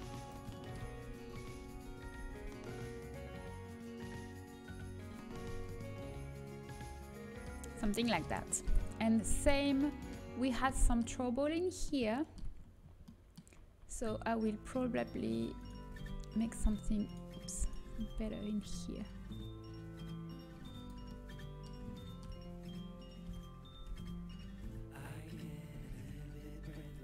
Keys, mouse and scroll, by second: 0.8 z, 1.6 z, 1.9 g, 5.5-10.2 middle drag, 12.1-13.7 middle drag, 13.7 click, 15.8 g, 18.4 g, 23.2 KP_7, 23.8 KP_Decimal, 24.5 z, 25.7 g.